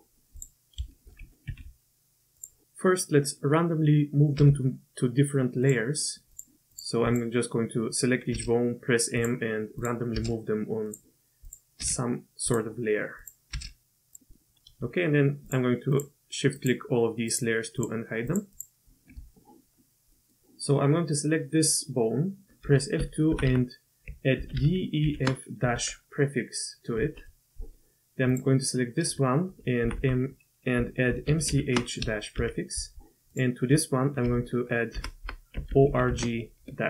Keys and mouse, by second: 0.9 shift+click, 1.5 shift+d, 4.4 m, 6.3 click, 6.7 click, 7.0 click, 8.3 m, 9.8 click, 10.1 m, 11.4 click, 12.0 m, 13.2 click, 14.0 m, 14.3 middle drag, 15.5-16.0 shift+drag, 16.6 shift+click, 17.3 shift+click, 17.8 shift+click, 18.3 shift+click, 18.5 shift+click, 20.1 click, 22.6 F2, 23.4 Left, 29.5 F2, 29.9 Left, 34.2 F2, 35.2 Left.